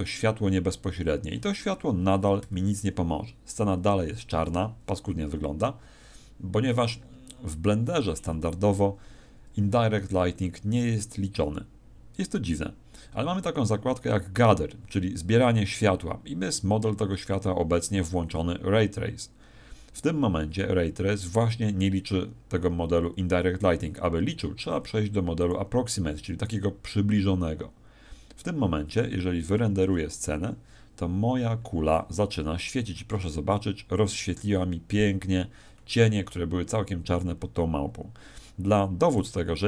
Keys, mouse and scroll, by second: 5.2 Escape, 13.4-15.2 scroll down 2, 15.6 scroll down 1, 25.4 click.